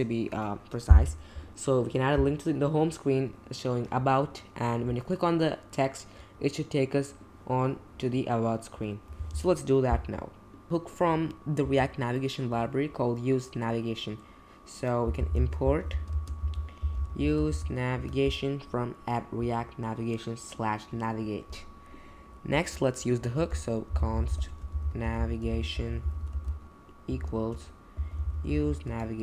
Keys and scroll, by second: 11.6 Return, 14.8-18.0 typing, 23.3 Return, 23.6-29.2 typing.